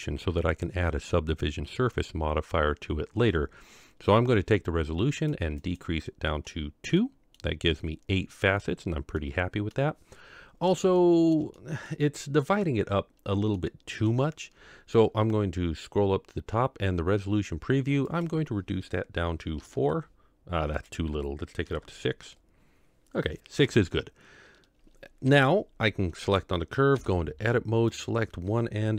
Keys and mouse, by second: 5.7 click, 7.0-7.3 middle drag, 9.2-9.7 middle drag, 11.0-11.4 shift+middle drag, 11.5-11.8 middle drag, 13.5 middle click, 18.0-19.8 drag, 20.9 click, 25.2 KP_7, 26.3 click, 26.9 Tab, 28.0 click.